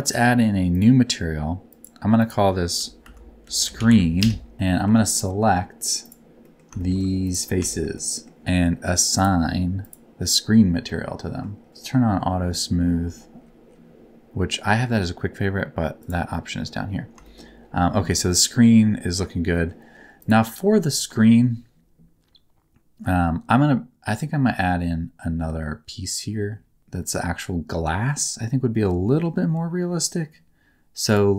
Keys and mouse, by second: 0.7 click, 1.7 click, 2.3-4.2 drag, 3.7 e, 4.5 Tab, 4.8 3, 5.1 click, 6.0 click, 6.4 middle click, 6.8 shift+middle click, 7.2 ctrl+click, 7.7 shift+middle click, 9.1 click, 10.8 middle click, 12.6 q, 16.0 click, 17.2 shift+middle click, 19.6 middle click, 20.2 click, 28.5 middle click, 31.0 click.